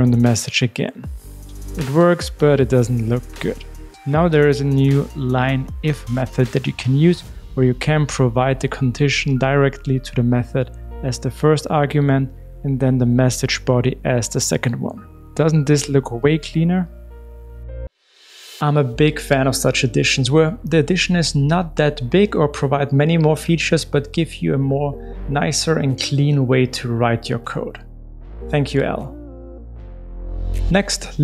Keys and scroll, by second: 1.2 Return, 11.5 Return, 12.4 Return.